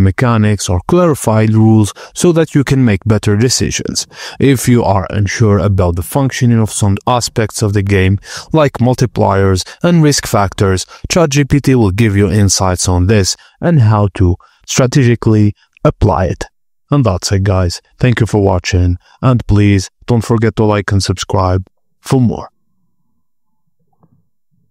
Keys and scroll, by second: 3.2-10.5 typing.